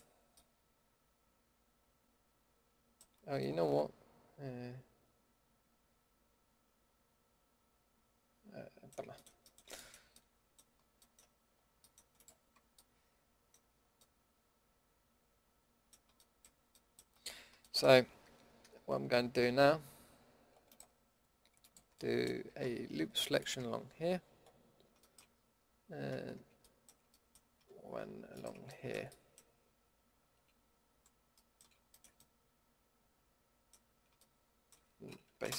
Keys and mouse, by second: 0.5-1.2 middle drag, 3.2-4.3 middle drag, 8.0 middle click, 8.3 middle click, 8.6 middle drag, 10.5-11.1 middle drag, 12.1-12.5 middle drag, 12.5 Tab, 13.7-14.7 middle drag, 21.9-25.5 middle drag, 22.3 a, 28.3-30.3 middle drag, 30.3 KP_Decimal, 34.0 middle drag, 35.4 Delete.